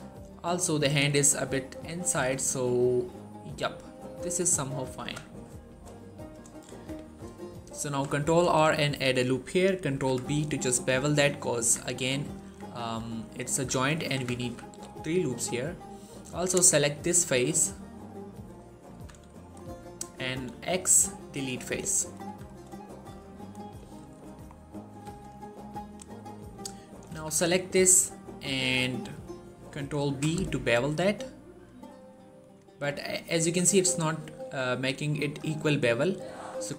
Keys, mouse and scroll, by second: 0.7 click, 1.2 r, 1.6 right click, 1.8 scroll down 1, 1.9 shift+middle click, 2.1 r, 4.1 click, 4.8 ctrl+z, 5.9 shift+middle click, 6.6 Tab, 7.7 ctrl+r, 8.1 click, 8.3 right click, 9.8 ctrl+b, 10.7 click, 11.4 Tab, 12.7 shift+middle click, 13.1 right click, 13.4 click, 13.8 shift+middle click, 14.0 Tab, 14.3 z, 15.1-17.2 drag, 16.6 middle click, 17.3 scroll up 1, 17.7-18.3 middle click, 18.6 scroll up 1, 18.8 z, 19.1 shift+middle click, 20.2 x, 21.2 click, 21.5 scroll down 1, 21.7 middle click, 22.1 1, 22.3 scroll down 2, 22.6 shift+middle click, 24.3-24.8 shift+scroll up 2, 24.8 z, 25.1-26.1 click, 26.1 scroll up 1, 26.7 middle click, 27.0 z, 27.3 scroll down 1, 27.5 middle click, 29.9 ctrl+b, 32.3 click, 32.7 middle click, 33.4-34.1 scroll up 1, 36.1 ctrl+z.